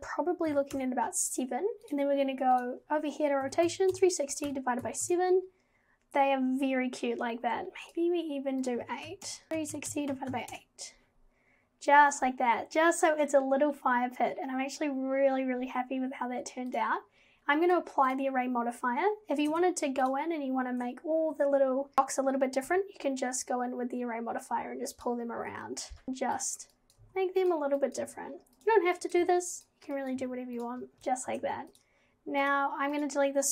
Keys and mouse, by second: 2.6-5.2 drag, 7.9 click, 8.8 click, 9.5-10.6 drag, 16.7 click, 17.7-18.2 drag, 19.5 Tab, 22.7 g, 26.0 g, 26.9 click, 27.0 g, 27.9 click, 28.0 g, 29.1 click, 29.2 g, 30.1 click, 30.2 g, 30.9 g, 31.3 Tab.